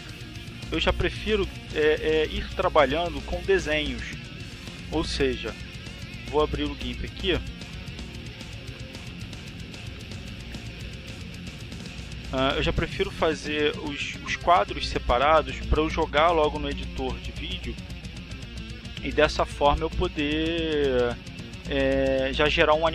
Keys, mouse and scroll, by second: 5.6 click, 7.3 click, 8.5 click, 9.7 click, 10.6 click.